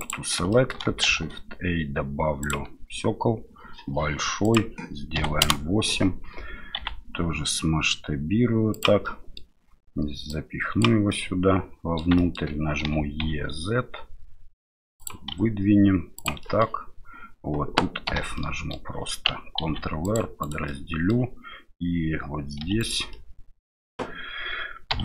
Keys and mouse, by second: 0.5 shift+middle click, 1.0 shift+a, 4.4-5.9 drag, 6.8 s, 9.2 middle click, 10.4 click, 11.2 middle click, 12.3 shift+middle click, 12.8 e, 15.3 s, 16.6 middle click, 18.1 f, 18.3 middle click, 19.6 ctrl+r, 20.8 middle click, 22.6 3, 22.8 right click, 23.1 middle click, 24.9 2.